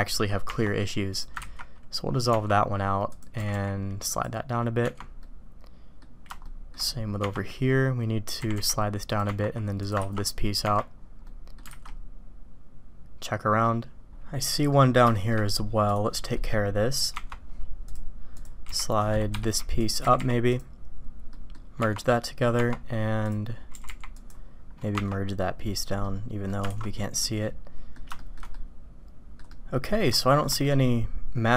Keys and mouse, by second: 1.0 click, 1.4 ctrl+x, 2.3 Tab, 3.4 g, 4.8 Tab, 5.2-6.0 drag, 6.4 shift+drag, 8.4 g, 9.2 Tab, 9.7 click, 10.0 ctrl+x, 10.6 Tab, 11.2-11.6 drag, 11.7 alt+a, 11.8-12.4 drag, 12.5 click, 13.6 click, 14.5 click, 15.1 shift+drag, 15.8 click, 16.3 click, 18.6 g, 19.8 click, 21.3 click, 21.8 Tab, 22.1 click, 23.2 click, 23.6 g, 24.9 Tab, 26.0-26.5 drag, 26.7 alt+a, 27.2-27.9 drag, 28.2 shift+drag, 28.5-29.4 drag, 29.5-30.0 drag, 30.2 shift+click, 30.6-31.5 drag.